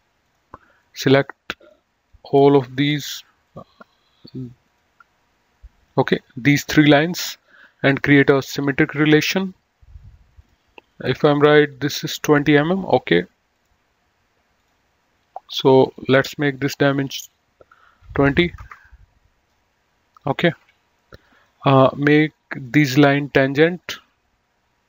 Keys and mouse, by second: 0.1 click, 2.1 click, 3.4 click, 4.5 ctrl+click, 5.7 ctrl+click, 8.1 click, 10.4 click, 13.5 click, 15.8 click, 18.0 KP_2, 18.6 Return, 18.6 KP_Enter, 20.5 Escape, 21.2 click, 22.4 click.